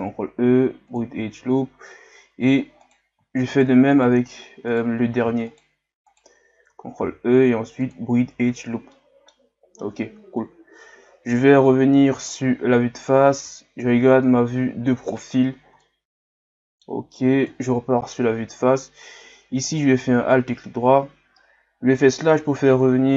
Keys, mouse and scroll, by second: 1.5-2.8 scroll up 1, 2.8 right click, 3.5 shift+right click, 3.9 shift+right click, 4.7 shift+right click, 5.5 shift+right click, 6.1 shift+right click, 7.0 ctrl+e, 8.5-8.9 scroll down 5, 8.9-10.4 middle drag, 10.4 KP_7, 13.4 KP_3, 15.8-17.5 middle drag, 17.5 KP_1, 18.6-19.4 scroll down 1, 19.7 alt+right click, 22.1 KP_Divide.